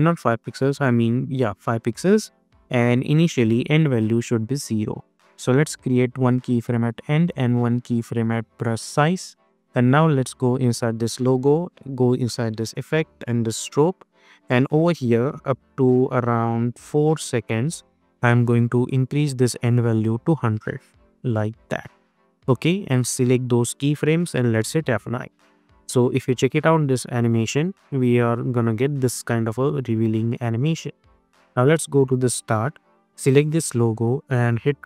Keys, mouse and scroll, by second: 3.9-6.4 drag, 8.8 click, 15.6 =, 17.0-22.4 drag, 22.9 click, 24.5 F9, 25.5 click, 25.9 space, 30.4 space, 31.6 click, 32.0-33.1 scroll up 1, 33.1 click.